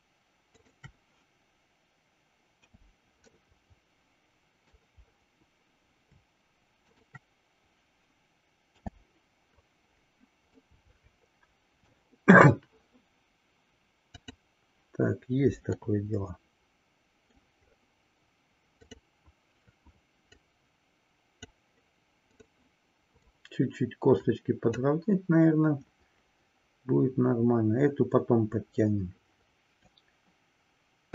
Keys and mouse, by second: 0.4-0.9 shift+drag, 3.4-4.9 middle drag, 10.5-11.9 middle drag, 15.8-17.5 middle drag, 18.9 click, 20.3-21.6 drag, 22.3 click, 23.4 click, 31.0 KP_3.